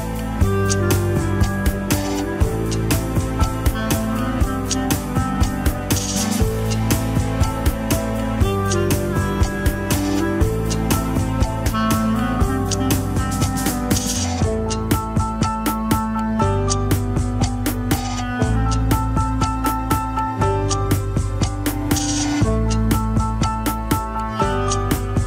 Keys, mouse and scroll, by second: 0.1 alt+z, 0.3 click, 0.6 Tab, 4.4 scroll down 1, 4.6 r, 7.3 KP_3, 7.8 Tab, 7.9 alt+z, 8.4 click, 8.8 click, 9.1 scroll down 6, 9.5 scroll up 2, 9.8 Tab, 11.3 click, 12.5 shift+s, 12.9 KP_1, 13.1 alt+z, 13.5 Tab, 13.6 click, 13.8 Tab, 14.1 scroll up 1, 14.3 r, 19.3 Tab, 19.5 alt+z, 19.9 click, 20.3 click, 21.3 click, 21.7 Tab, 21.9 middle click, 22.7 click, 23.3 shift+s, 23.7 KP_1, 23.9 alt+z, 24.4 Tab, 24.5 click, 24.6 Tab, 25.1 r.